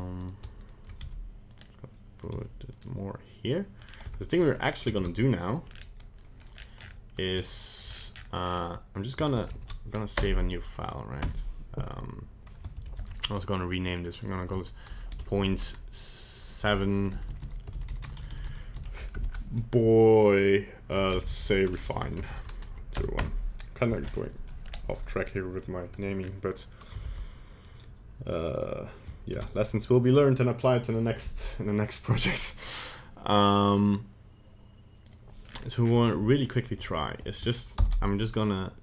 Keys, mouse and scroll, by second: 0.2 right click, 0.6 shift+right click, 1.0 g, 1.6 middle click, 2.3 g, 2.8 middle click, 3.8 scroll down 3, 4.0 Tab, 4.3 middle click, 4.9 ctrl+Tab, 5.4 right click, 5.7 scroll down 2, 6.2 middle click, 6.5 scroll down 1, 6.7 scroll up 8, 7.8 scroll down 4, 8.1 scroll up 2, 8.4 scroll down 2, 9.6 ctrl+shift+s, 10.1 KP_Add, 11.8 KP_Enter, 12.8 ctrl+shift+s, 14.0 click, 15.3 shift+Left, 17.1 Right, 17.2 Right, 17.8 shift+Right, 18.0 shift+Right, 18.3 shift+Right, 18.4 shift+Right, 23.4 KP_Enter, 24.0 scroll up 1, 24.3 middle click, 24.6 scroll up 2, 25.5 middle click, 25.7 middle click, 26.2-26.7 scroll up 2, 27.0 ctrl+Tab, 28.5 right click, 29.3 ctrl+Tab, 35.4-35.8 scroll down 6, 35.8 scroll up 5, 36.5 shift+right click, 37.7 ctrl+p.